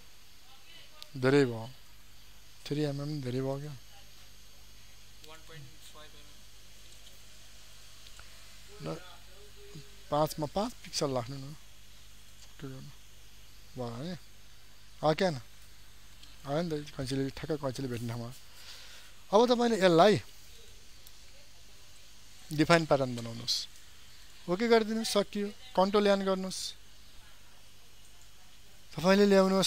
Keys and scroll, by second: 1.8 ctrl+alt+z, 14.9 ctrl+d, 26.5 ctrl+n.